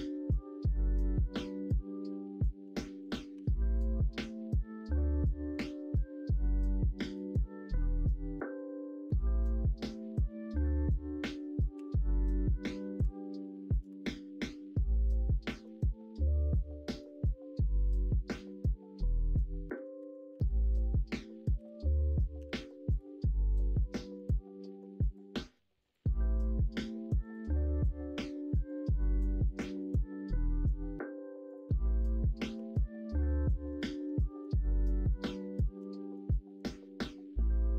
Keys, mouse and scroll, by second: 1.2 middle click, 2.7 p, 3.4 Tab, 3.9 middle click, 5.8-14.8 drag, 14.8-15.6 middle drag, 20.4 Right, 20.4-23.7 drag, 23.9 middle click, 24.6 middle click, 25.3 middle click, 26.2 middle click, 32.5 ctrl+a, 33.6 middle click, 33.9 Tab, 34.2 middle click, 35.6 alt+z, 36.0 middle click, 37.5 click.